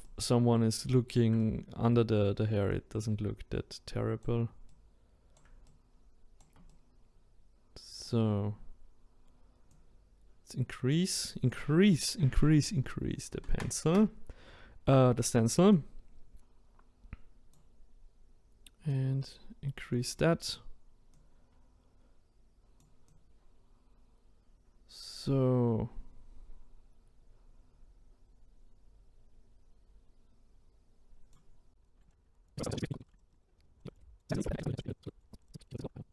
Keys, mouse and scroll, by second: 9.9-26.1 drag, 31.7 click, 31.8 right click, 32.2 click, 32.6 middle click, 32.7 scroll down 1, 32.9 middle click, 33.0 shift+right drag, 33.4 ctrl+right click, 33.5 click, 33.7 middle click, 34.0 click, 34.8 middle click, 35.0 click, 35.0-35.6 scroll up 5, 35.3 click, 35.6 middle click, 35.7 click, 35.8 middle click, 36.0 click.